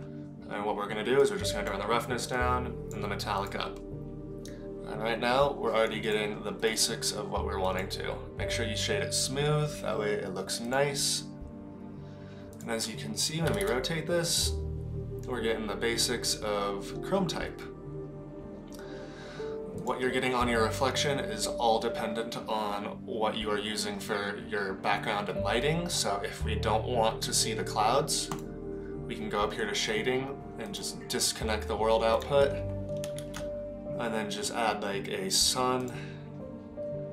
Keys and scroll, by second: 13.4 r, 33.2 shift+a.